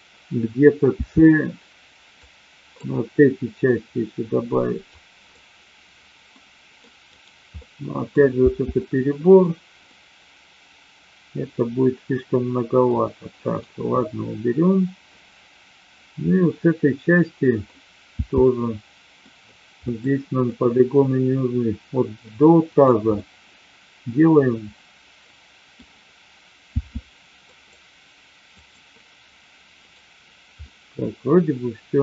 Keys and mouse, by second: 0.9 c, 4.9 click, 6.4 middle click, 7.0 right click, 7.6 middle click, 8.3 c, 9.8-12.8 middle drag, 13.4 right click, 14.0-17.6 middle drag, 18.2 c, 19.8 middle click, 20.4 middle click, 23.2-25.8 middle drag, 26.6 c, 28.5 click, 29.8 right click, 30.5-32.0 middle drag.